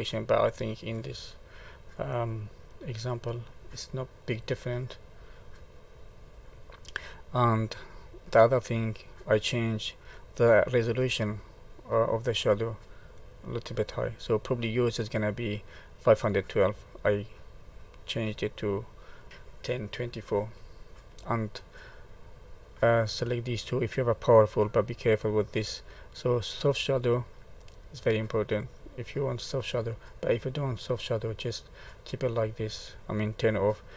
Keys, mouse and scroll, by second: 1.3 middle click, 3.1 click, 4.2 click, 6.0 click, 8.9 click, 14.4 click, 26.4 click, 29.7 middle click.